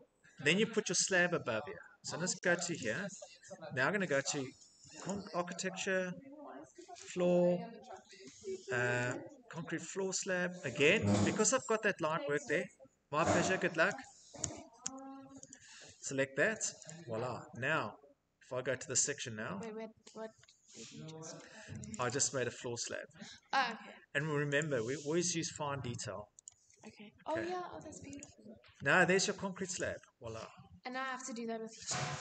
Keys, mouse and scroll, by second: 2.3 click, 2.4 click, 3.4 middle click, 3.5 middle click, 4.7 click, 6.7 click, 8.7 click, 10.6 click, 12.5 Tab, 12.9 Tab, 13.5 Tab, 14.0 Tab, 17.8 Escape, 20.9 middle click, 21.0 middle click, 21.6 click, 21.7 click, 22.5 Escape, 24.2 right click, 25.1 click, 25.1 scroll, 26.1 click, 27.8 click, 28.3 scroll, 28.4 Escape, 29.4 click, 29.9-30.2 scroll, 31.4 scroll, 32.0 middle click, 32.1 middle click.